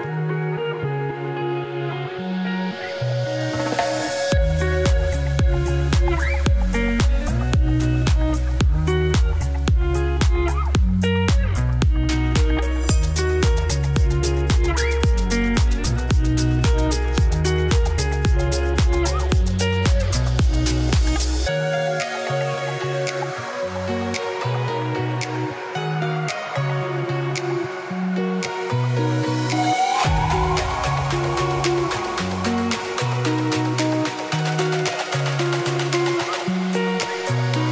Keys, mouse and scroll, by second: 1.9 click, 2.2 Tab, 3.5-5.1 drag, 5.1 r, 6.2 click, 6.6 Tab, 7.8 click, 8.0 Tab, 8.7-11.0 drag, 11.0 middle click, 11.9 scroll up 3, 12.2 scroll down 2, 12.8 click, 13.2 click, 13.5 click, 13.7 click, 16.9 middle click, 17.2 middle click, 17.7 scroll up 5, 17.9 Tab, 18.4 alt+click, 18.9-22.5 drag, 22.5 Tab, 23.0 click, 23.7 Tab, 25.1 click, 25.9 scroll down 6, 26.1-27.8 shift+middle drag, 27.8 scroll up 4, 28.7 click, 29.4 s, 30.2 click, 32.3 middle click, 32.5 scroll up 2, 32.6 shift+middle click, 32.8 Tab, 33.1 click, 33.3 ctrl+KP_Add, 33.4 ctrl+KP_Add, 33.8 KP_Decimal, 34.2 middle click, 34.7-35.0 ctrl+KP_Add, 35.3 ctrl+KP_Subtract, 36.0-37.5 drag.